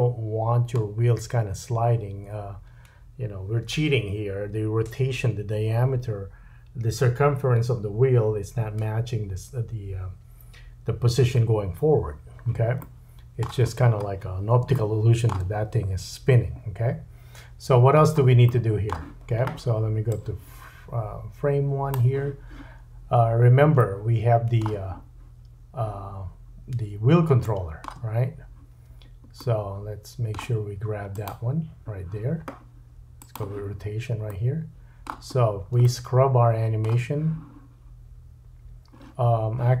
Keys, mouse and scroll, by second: 1.0-2.7 scroll up 3, 12.8 middle click, 13.7-14.6 scroll up 1, 14.7 shift+middle click, 16.8-20.1 middle drag, 17.3-18.4 scroll down 5, 20.1-22.7 drag, 22.7-23.1 scroll up 5, 24.1-24.7 shift+drag, 24.1-24.7 shift+middle drag, 26.0-31.3 drag, 26.0-26.7 middle drag, 26.7-27.3 scroll up 3, 27.4 shift+middle click, 28.1-29.4 scroll up 2, 29.4 middle click, 31.3-33.2 middle drag, 33.2-39.8 drag, 34.3 middle click, 35.3-35.7 scroll down 2, 35.9 shift+middle click.